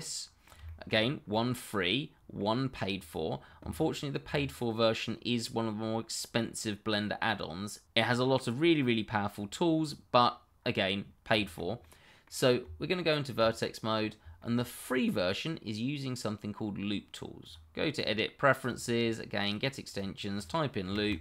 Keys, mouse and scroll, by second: 0.8 shift+middle click, 0.9-1.3 shift+scroll up 1, 1.3 middle click, 2.9-3.3 scroll down 1, 4.6 middle click, 8.5 middle click, 9.3-10.1 scroll down 1, 10.1 scroll up 1, 10.9-11.3 scroll down 1, 11.4 shift+middle click, 11.5 middle click, 12.6 Tab, 13.9 scroll up 1, 14.4 shift+middle click, 17.4 click, 19.9 double click, 20.8 l, 21.1 o.